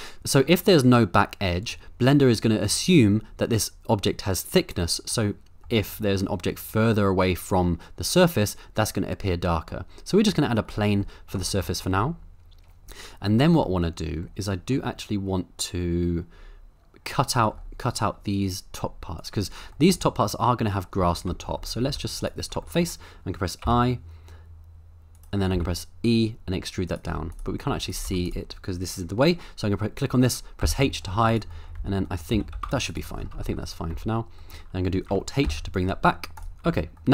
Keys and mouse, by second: 0.2 middle click, 1.7-2.7 middle drag, 5.2-5.6 middle drag, 5.9 middle click, 9.8-10.4 middle drag, 11.1 middle drag, 11.5 shift+middle click, 12.0-13.4 middle drag, 13.6-14.7 middle drag, 17.3 middle drag, 19.2 click, 19.8 shift+middle click, 20.0 middle click, 21.0 Tab, 21.4 shift+middle click, 21.8 3, 22.2 click, 22.7 middle click, 23.6 i, 25.5 e, 26.9 click, 27.1 z, 27.7 z, 28.1 Tab, 28.2 click, 30.6 h, 31.8 Tab, 32.1 middle click, 32.3 g, 32.5 z, 32.9 shift+click, 33.7 middle click, 33.9 Tab, 35.4 alt+h, 36.5 Tab, 36.5 g, 36.6 Tab, 37.0 middle click.